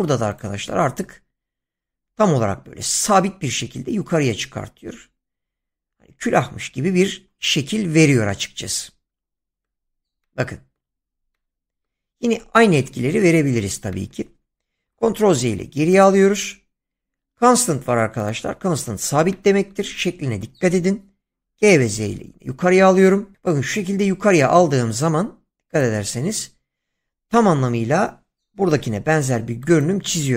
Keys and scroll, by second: 14.8 ctrl+z, 21.3 g, 22.0 z, 28.7 <.